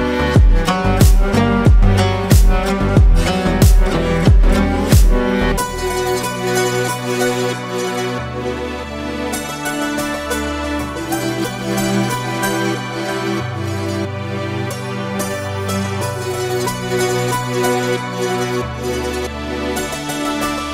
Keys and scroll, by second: 0.7 ctrl+space, 3.2 ctrl+g, 7.4 ctrl+space.